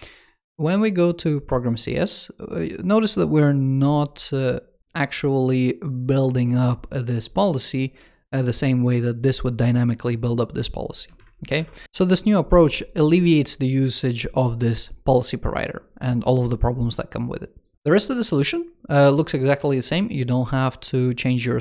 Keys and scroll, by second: 11.0 super+Right.